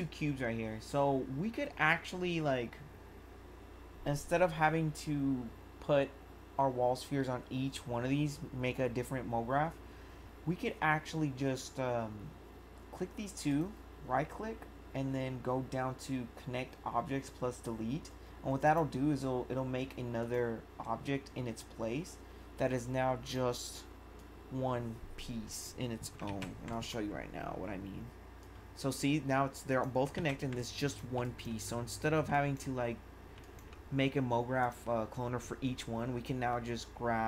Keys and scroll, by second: 31.1 1.